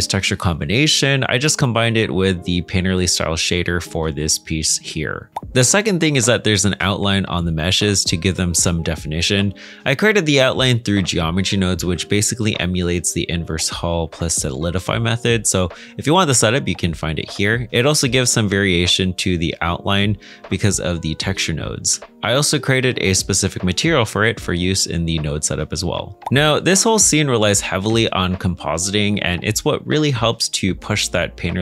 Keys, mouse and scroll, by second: 1.9 middle click, 5.3 ctrl+space, 6.1 middle click, 7.3-8.2 scroll down 1, 8.2 middle click, 11.7 space, 13.3 middle click, 21.9 ctrl+space, 22.0 middle click, 26.2 middle click, 31.1 middle click.